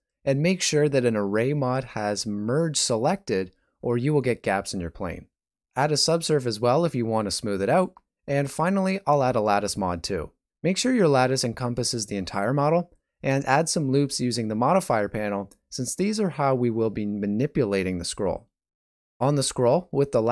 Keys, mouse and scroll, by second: 0.4 middle click, 0.8 shift+middle click, 1.7 middle click, 5.0 click, 5.9 middle click, 8.3 shift+middle click, 8.4 shift+z, 9.2 n, 10.7 click, 11.8 click, 12.1 click, 13.2 click, 14.7 click, 15.3 click, 17.0 right click, 17.7 click, 18.3 click.